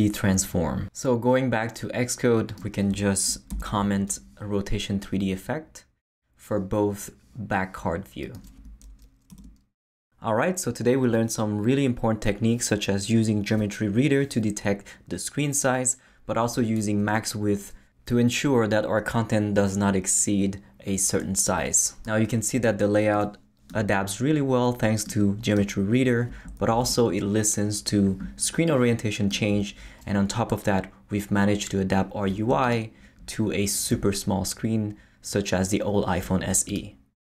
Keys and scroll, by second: 3.5 super+/, 9.3 super+/, 26.6 super+Left.